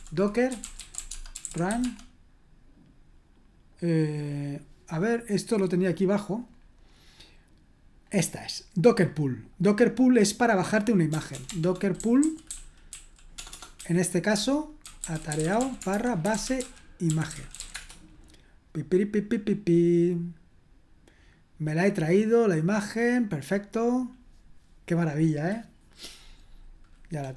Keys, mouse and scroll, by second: 0.0-2.1 typing, 5.4-7.1 scroll down 1, 8.3-8.9 scroll down 2, 9.0 click, 9.2 click, 9.5 click, 10.4 click, 11.1-18.3 typing.